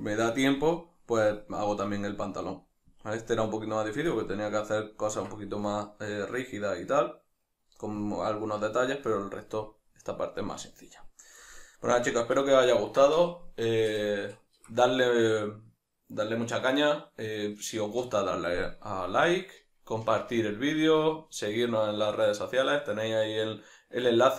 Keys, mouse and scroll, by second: 8.1 click, 8.7-24.3 middle drag.